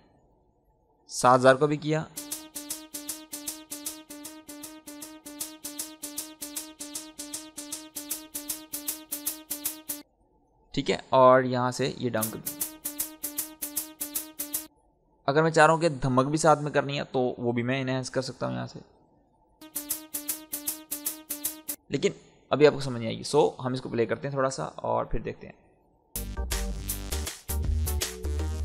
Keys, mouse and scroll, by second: 2.0 space, 3.7-9.9 drag, 9.9 space, 11.0 click, 12.1 space, 13.4 click, 14.6 space, 18.0-19.6 drag, 19.6 space, 20.5 click, 21.7 space, 22.7 scroll down 1, 23.6 click, 24.0 scroll down 1, 25.2 click, 26.1 space, 26.2-26.9 scroll down 1.